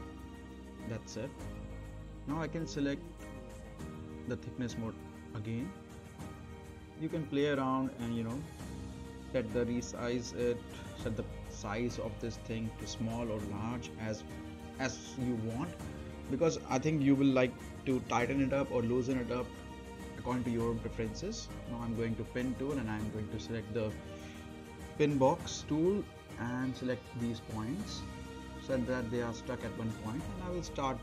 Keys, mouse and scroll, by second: 0.3-0.7 scroll up 1, 0.7 click, 3.3 click, 4.1-5.7 right drag, 6.6 middle click, 7.6-7.9 scroll down 1, 7.9 middle click, 8.2-9.5 scroll up 1, 9.5 z, 10.2 click, 11.2 Right, 13.6 click, 14.4 Left, 17.1 click, 17.6-18.3 right drag, 19.3-22.3 drag, 22.8-23.7 right drag, 24.2-25.2 drag, 27.4-27.9 right drag, 29.0 5, 29.6 scroll down 1.